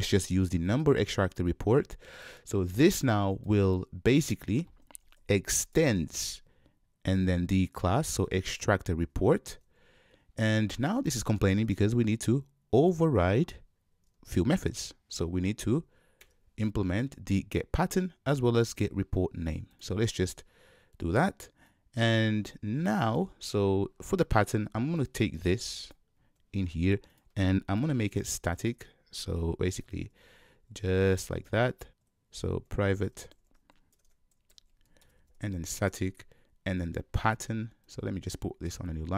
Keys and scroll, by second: 5.8 Return, 26.4 super+x, 29.8 super+v, 35.1 Return.